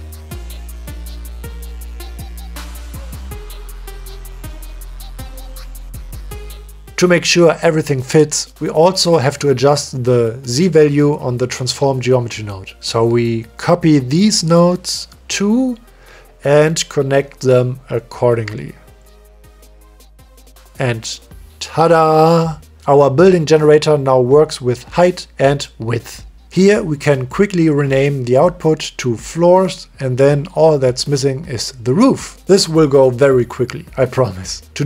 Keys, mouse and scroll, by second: 0.7 click, 1.8 click, 3.5-4.0 drag, 5.0 click, 7.1 click, 7.6 click, 8.0 click, 10.0 click, 10.5 click, 11.1 click, 11.4 click, 11.6 click, 11.9 click, 12.1 click, 12.7 click, 13.5 click, 13.9 click, 14.4 click, 14.6 click, 16.1 shift+d, 17.1 click, 17.4 click, 18.8 click, 19.3 click, 20.0 click, 22.5 click, 22.7 click, 24.0 click, 24.4-25.6 drag, 25.7 click, 26.8 click, 27.8 click, 29.4 click, 29.8-32.0 drag, 31.0 o, 33.5 click, 34.4 middle click.